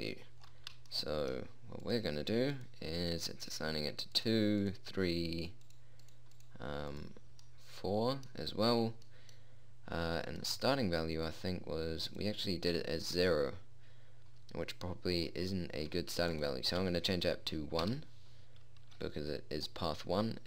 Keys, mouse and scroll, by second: 0.9-2.3 middle drag, 9.0 middle click, 12.6-13.6 drag.